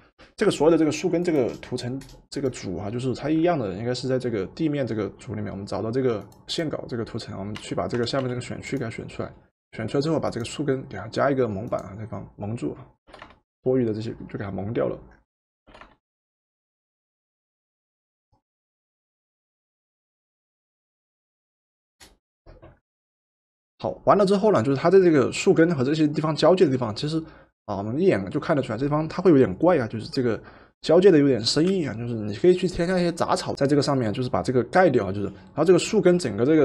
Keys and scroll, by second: 7.6 w, 8.3 w, 13.2 v, 15.7 v.